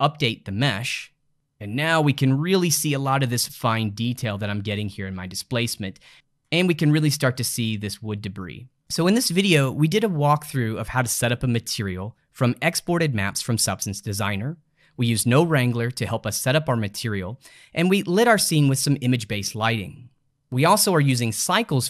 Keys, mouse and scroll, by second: 3.8-6.1 middle drag, 7.5-8.8 middle drag.